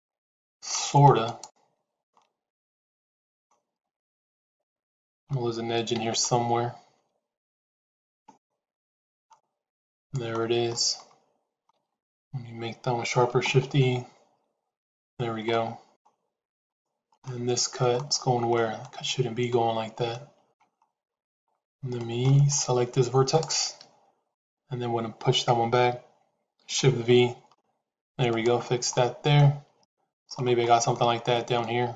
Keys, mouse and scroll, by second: 2.0-3.4 middle drag, 4.4 shift+click, 7.3 shift+z, 8.1-9.2 middle drag, 9.9 click, 10.6 middle click, 12.1 shift+z, 15.4 middle click, 16.5 shift+click, 17.1 middle click, 18.1 shift+middle click, 18.7 middle click, 20.0 shift+middle click, 21.9 shift+middle click, 23.2 click, 26.8 shift+v, 28.8 middle click, 29.7 shift+middle click, 30.5 middle click, 31.5 shift+middle click.